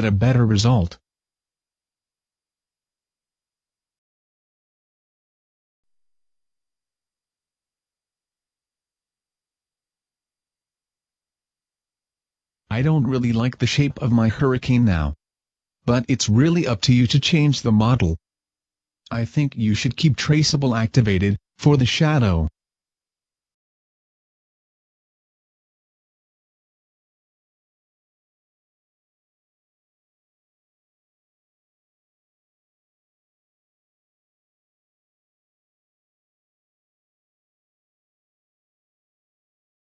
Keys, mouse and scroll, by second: 10.3 click, 11.1 scroll up 1, 11.3 Tab, 12.6 scroll down 1, 14.1 click, 14.7 click, 15.2 scroll down 1, 16.1 alt+right click, 16.7 s, 18.7 click, 19.1-20.3 scroll up 1, 20.3 alt+right click, 20.8 s, 21.9 click, 22.1 Tab, 30.1 Escape, 31.1 Tab, 31.9 alt+right click, 32.6 s, 34.1 click, 34.4 alt+right click.